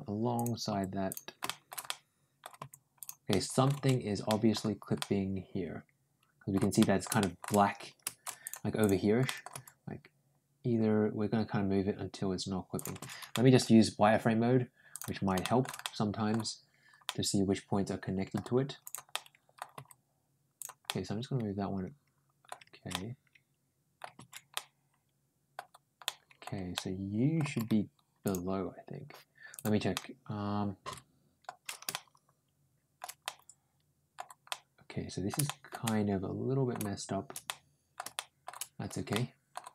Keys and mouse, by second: 0.2 click, 0.5 g, 1.3 middle click, 1.7 middle click, 2.4 g, 3.1 middle click, 4.1 middle click, 4.8-6.4 middle drag, 6.6 ctrl+middle click, 7.0 ctrl+shift+middle click, 8.3 click, 8.6 click, 9.1 middle click, 9.4 g, 13.1 middle click, 14.7 ctrl+click, 15.3 ctrl+shift+middle click, 15.6 ctrl+middle click, 16.9-18.1 middle drag, 18.6 click, 18.9 middle click, 19.6 g, 20.7-22.3 middle drag, 22.7-23.8 middle drag, 24.4-25.4 ctrl+middle drag, 25.9 ctrl+middle click, 26.6 ctrl+middle click, 27.3 ctrl+g, 29.4 click, 29.8-31.3 middle drag, 31.7-32.8 shift+middle drag, 33.1 middle click, 34.3 middle click, 35.3 shift+middle click, 35.7 middle click, 37.3 middle click, 38.0 shift+middle click, 38.9 middle click.